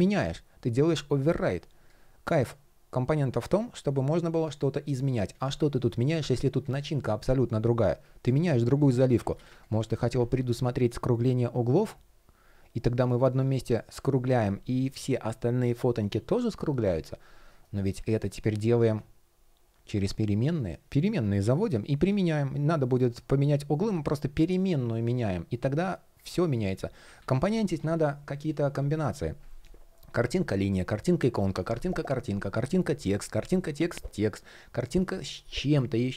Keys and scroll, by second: 8.7 super+z, 17.1 shift+p, 26.8 super+z.